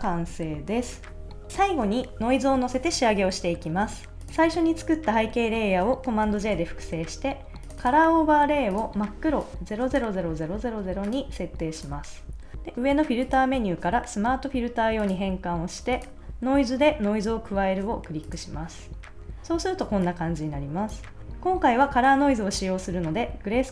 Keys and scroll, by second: 6.2 super+j.